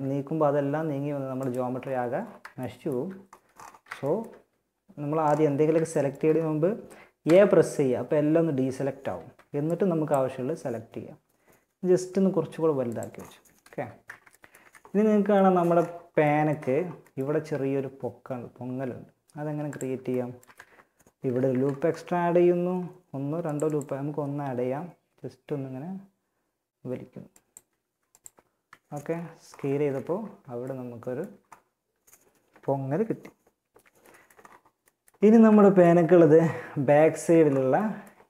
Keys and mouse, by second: 1.2-2.4 right drag, 6.4 a, 8.6 b, 10.6 s, 12.9 a, 13.8 z, 18.9-20.6 drag, 20.6 ctrl+r, 23.3 s, 27.0 s, 27.8 Tab, 29.1 a.